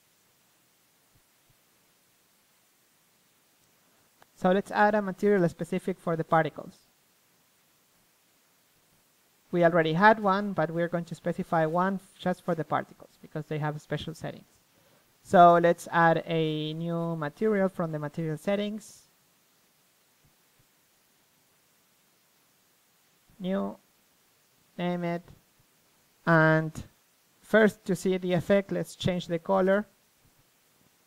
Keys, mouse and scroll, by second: 5.1-6.4 middle drag, 7.7-9.1 middle drag, 12.4 middle click, 13.1-15.1 drag, 16.5-21.0 drag, 21.2-31.0 drag.